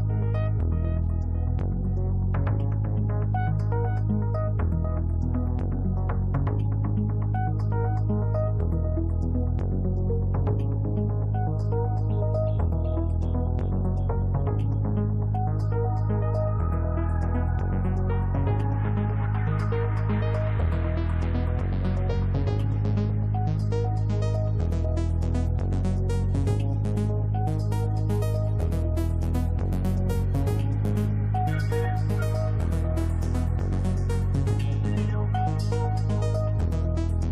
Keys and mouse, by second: 1.6 click, 3.5-4.5 drag, 5.6 click, 7.0 click, 7.5 click, 12.7 click, 13.5 click, 21.3 click, 25.2 click, 25.9 click, 26.3 click, 26.9 click, 27.8 click, 29.2 right click, 29.4 click, 29.4 right click, 29.6 click, 33.3 click, 37.2 click.